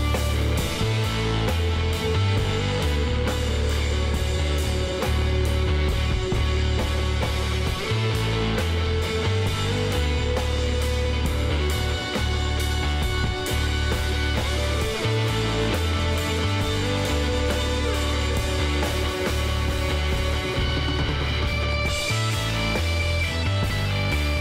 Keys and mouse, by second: 0.6-2.1 middle drag, 2.5 KP_Decimal, 4.2-7.6 drag, 8.3-9.5 drag, 9.5-12.8 middle drag, 12.8-14.6 drag, 14.6-16.9 middle drag, 16.9-18.6 drag, 19.2-23.5 middle drag, 21.9 k.